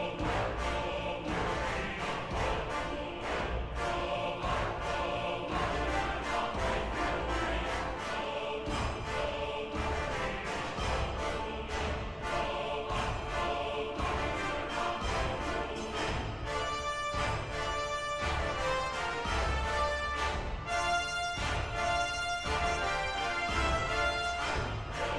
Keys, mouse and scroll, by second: 2.1 ctrl+-, 2.6 ctrl++, 12.1 b, 13.8 ctrl++, 15.4 ctrl+-, 15.5 ctrl++, 15.6 ctrl+-, 21.2 ctrl+-, 21.5 ctrl++, 21.6 ctrl+-.